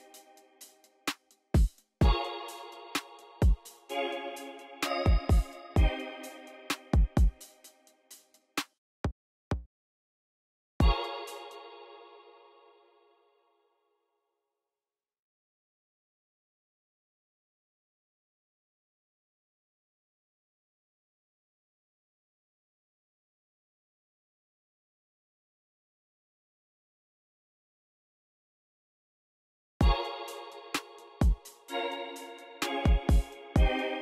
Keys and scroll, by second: 0.3 v, 7.7 v, 8.1 x, 10.4-11.2 typing, 12.4 alt+n, 14.1 ctrl+b, 14.4-15.5 typing, 16.2 Page_Down, 16.6 ctrl+b, 17.0 Return, 18.1-20.1 typing, 20.5 Right, 22.0-22.9 typing, 23.8 super+z, 24.0 typing, 26.3-29.7 typing, 31.8 alt+r, 33.8 alt+r.